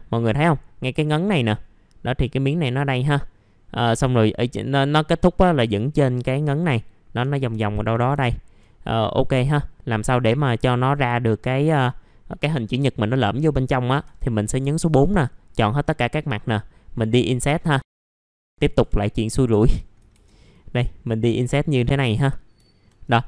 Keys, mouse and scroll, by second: 7.2 1, 7.5 middle click, 8.2 alt+middle click, 9.4 alt+middle click, 10.1 middle click, 13.4-14.4 scroll up 4, 14.4 middle click, 15.7-16.3 scroll up 1, 16.3 right click, 17.8 click, 18.7 F3, 19.4 alt+middle click, 20.5-22.5 drag, 22.6 alt+middle click, 23.0 right click.